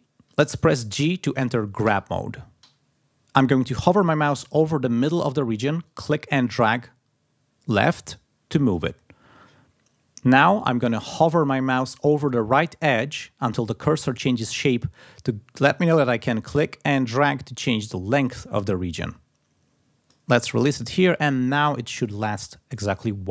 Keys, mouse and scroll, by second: 1.4 click, 5.8-8.9 drag, 16.1-20.2 drag, 22.4 click.